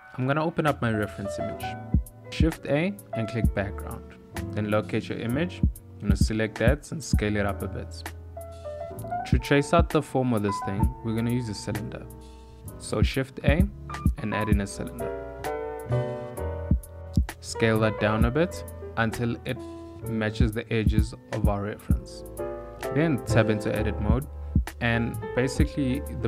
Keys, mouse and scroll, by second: 4.6 click, 5.5 click, 6.3 s, 11.2 click, 11.5 click, 12.5 shift+middle click, 12.7 shift+a, 17.7 ctrl+middle click, 18.8 s, 22.0 ctrl+middle click, 22.3 s, 22.4 Tab, 23.7 z, 25.9 click.